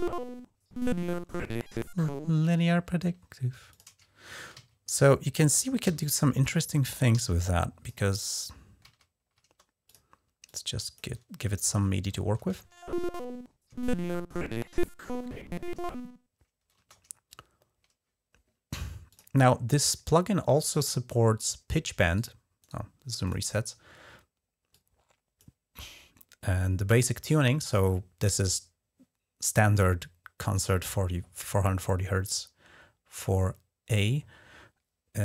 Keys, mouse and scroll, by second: 2.1 space, 3.3 g, 3.5 click, 4.3 ctrl+d, 5.6 t, 5.8 click, 6.9 g, 7.2-7.7 drag, 8.6 alt+d, 9.7 click, 10.2-11.9 drag, 11.9 Home, 12.2 space, 16.5 space, 18.9 click, 20.4 click, 22.4 right click, 23.0 click, 24.5 click.